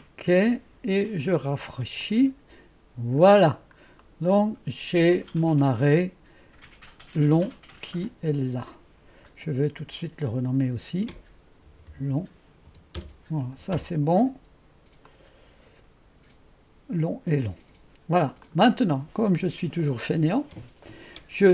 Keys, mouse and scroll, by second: 1.5 typing, 2.1-3.1 drag, 9.3 click, 10.7 F2, 11.7-12.7 typing, 13.0 Return, 15.1-17.2 drag, 17.8-18.5 typing, 18.5 click.